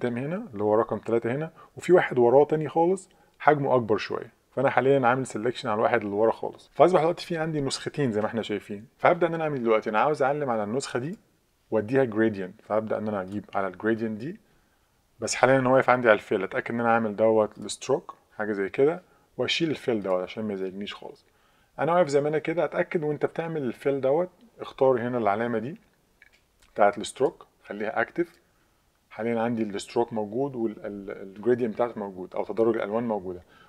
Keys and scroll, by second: 6.6 super+0.